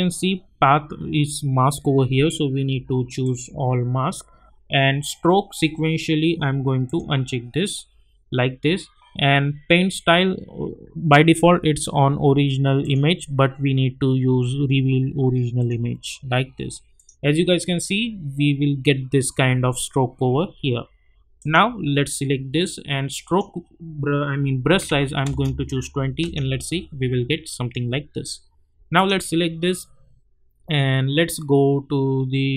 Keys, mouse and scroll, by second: 3.2 click, 6.8 click, 12.8 click, 15.6 click, 18.6-19.4 scroll up 1, 21.4 click, 25.2 Return, 26.2 click, 28.9 click.